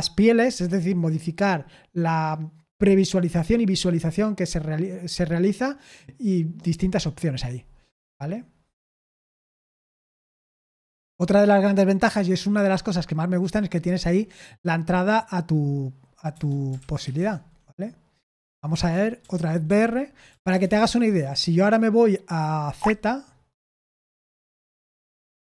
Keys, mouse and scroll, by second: 11.3-14.5 scroll down 1, 14.5 k, 16.3-20.7 typing, 21.0 Escape, 22.7 z, 23.8 Return, 24.7 z, 25.1 Return.